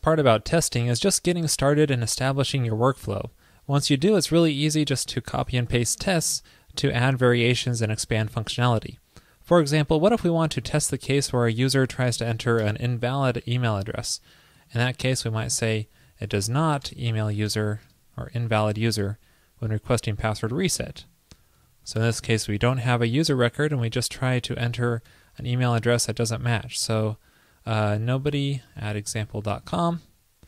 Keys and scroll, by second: 7.6 super+c, 11.4 super+v, 17.2 alt+Right, 24.9 shift+super+Right.